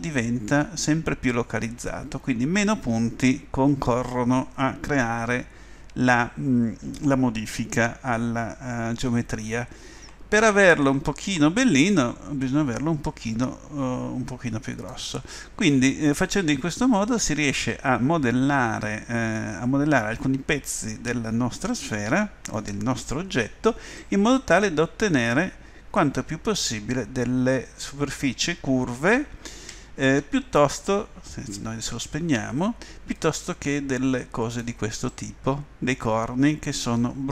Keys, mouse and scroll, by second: 15.4-17.2 middle drag, 17.3 middle click, 21.8 middle click, 29.5 ctrl+z, 31.9 o, 33.1-35.3 drag.